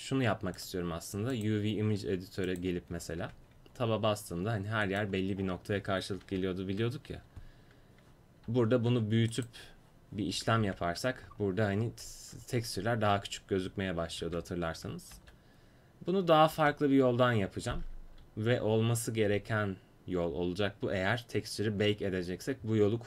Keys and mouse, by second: 0.6-3.4 drag, 3.4 Tab, 5.0-6.5 drag, 6.5 ctrl+l, 8.7 s, 10.8 Tab, 14.4 Tab, 15.3 ctrl+z, 16.7 ctrl+z, 18.1 Tab.